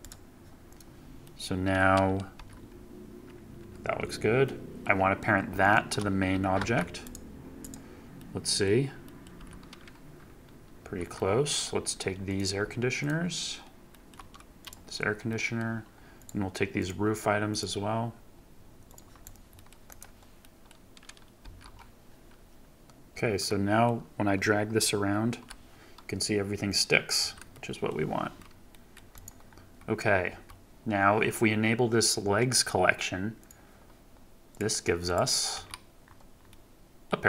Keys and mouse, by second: 1.2-1.7 drag, 1.7-2.3 middle drag, 2.3 g, 3.5 F1, 3.9 Escape, 6.5 ctrl+p, 8.1-8.6 drag, 9.0 middle drag, 9.3 g, 10.7 Escape, 11.1-11.5 middle drag, 15.2 shift+middle drag, 16.7 shift+middle click, 18.8 shift+middle click, 19.2 shift+middle click, 19.5 middle click, 19.8 middle click, 20.4 middle drag, 21.3 g, 23.1 Escape, 23.4-23.8 drag, 25.2 g, 27.1 Escape, 27.4-27.8 drag, 28.6 drag, 29.1 click, 30.2 KP_3, 35.5 KP_Decimal, 36.4-37.0 drag.